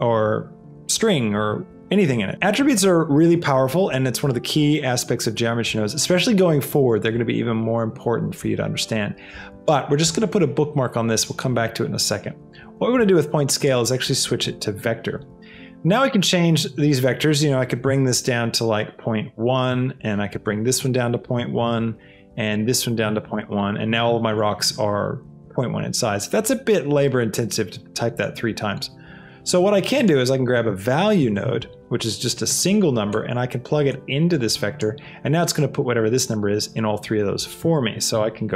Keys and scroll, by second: 19.3 KP_1, 19.6 Return, 21.5 Return, 21.8 KP_1, 23.0 Return, 29.2 shift+a, 30.3 v, 31.4 e, 31.7 Return, 38.0 KP_1, 38.3 Return.